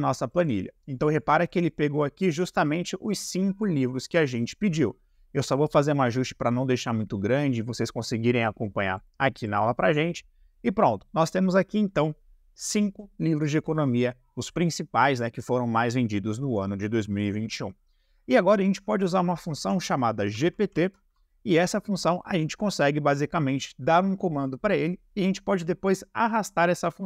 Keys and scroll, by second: 20.2 =, 20.4 g, 20.6 p, 20.7 t.